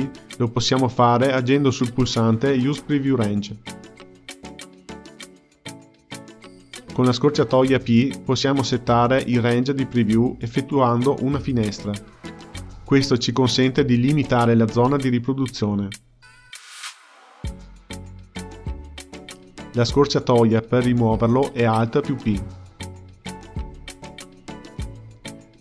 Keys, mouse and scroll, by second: 0.5 click, 6.4-8.6 middle drag, 8.6 p, 10.7 space, 18.3 click, 18.4 space, 21.6 alt+p, 24.4 click, 25.0 KP_Decimal.